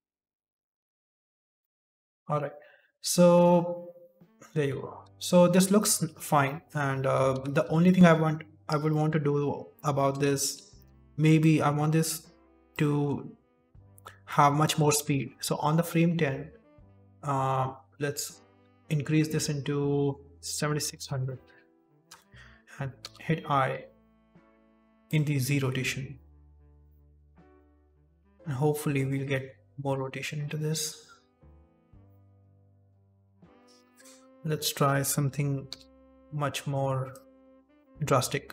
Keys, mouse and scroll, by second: 0.0 click, 0.0 scroll up 3, 0.9-1.4 scroll down 3, 1.6-2.0 scroll down 11, 4.9 shift+space, 5.7 shift+middle click, 6.4 middle click, 6.7-7.9 scroll down 2, 7.9 KP_7, 8.8 middle click, 9.7 middle click, 10.4 ctrl+s, 11.3 click, 12.9-13.3 scroll up 4, 13.3 middle click, 13.6-15.1 scroll up 10, 14.2 middle click, 15.1 middle click, 18.2 click, 20.9 KP_0, 22.9 i, 25.0 click, 26.4-26.8 scroll down 3, 26.8 shift+middle click, 27.0 scroll up 4, 27.3 shift+space, 28.3-28.8 scroll up 2, 28.8-29.3 scroll down 2, 31.3-32.0 scroll down 13, 32.0 middle click, 33.6 shift+space, 33.8 click, 33.8 KP_0, 35.6-35.9 i, 37.0 right click, 37.7 shift+right click, 37.7 v.